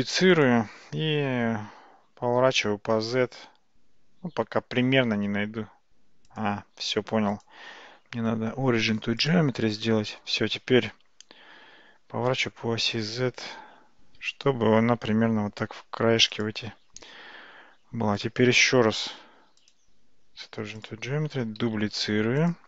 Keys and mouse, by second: 2.3 r, 7.5-9.4 right drag, 12.1 r, 18.2 click, 19.8-20.9 right drag, 21.8 shift+d.